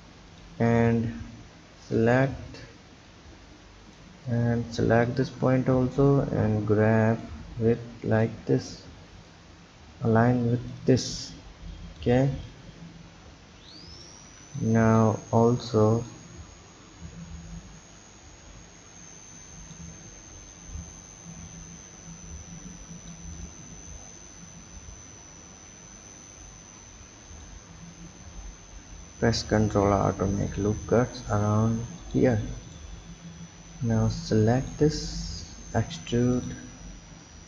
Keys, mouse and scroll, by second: 0.7 click, 1.7 b, 3.0 click, 4.3 click, 4.6 b, 5.7 drag, 7.7 click, 9.3 click, 11.0 click, 11.4 b, 12.4 click, 14.0 click, 14.2 b, 16.1 click, 20.5 click, 23.3 click, 25.9 ctrl+r, 32.7 click, 33.7 b, 35.6 e, 37.2 drag.